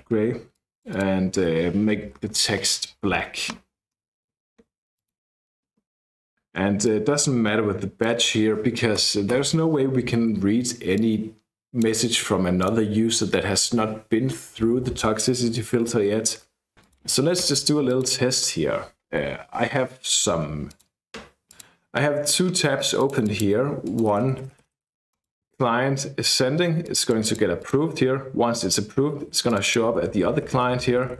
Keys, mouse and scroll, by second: 0.6 click, 1.7-2.9 typing, 3.9-4.8 scroll down 2, 5.0 click, 6.9-8.2 drag, 9.1 BackSpace, 9.4 BackSpace, 11.0-12.2 drag, 12.6 click, 16.8 click, 17.9 click, 20.7 click, 21.5 click, 23.0 click, 23.9-25.4 typing, 23.9 click, 25.1 click, 29.6-31.1 typing.